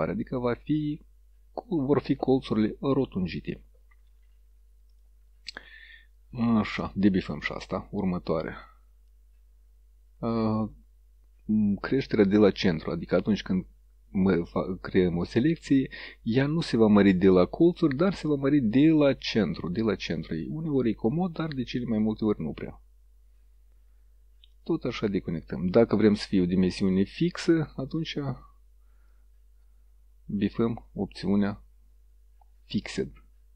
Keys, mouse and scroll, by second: 5.0 click, 6.8 click, 10.7 click, 13.2-17.1 drag, 17.8 click, 19.0-20.7 drag, 22.1-23.6 drag, 24.6 click, 27.0 click, 28.0 click, 29.2-31.7 drag.